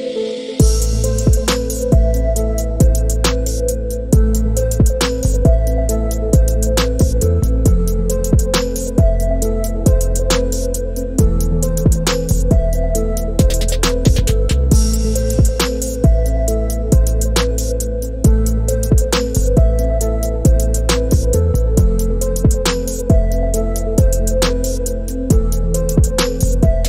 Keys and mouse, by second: 0.8 click, 1.8 click, 4.8 click, 6.4-7.7 drag, 8.8 click, 13.3 click, 14.8-16.6 drag, 19.4-20.9 drag, 25.6-26.8 middle drag.